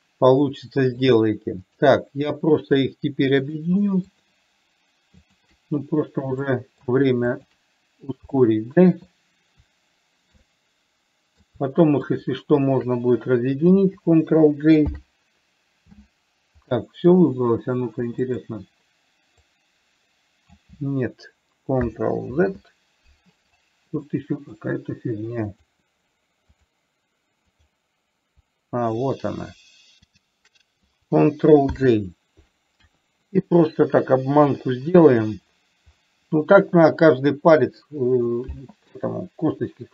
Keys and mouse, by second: 2.0 click, 3.7 shift+drag, 4.4-4.7 shift+drag, 5.5 shift+click, 6.7-7.2 middle drag, 8.7-9.1 middle drag, 10.9-11.9 middle drag, 12.4 shift+click, 15.2 ctrl+j, 17.1 middle click, 18.6 click, 19.7-20.9 drag, 22.7 ctrl+z, 24.5-24.9 middle drag, 25.9 click, 27.9 click, 30.5 shift+click, 32.0 ctrl+j, 33.2 KP_1, 34.9 KP_3.